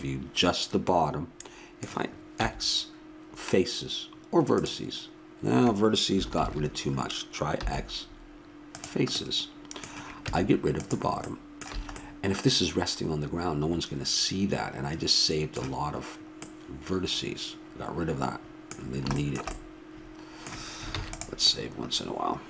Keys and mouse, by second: 2.4 x, 6.4 ctrl+z, 7.6 x, 10.3 Tab, 11.8 a, 20.9 ctrl+s, 20.9-22.4 middle drag.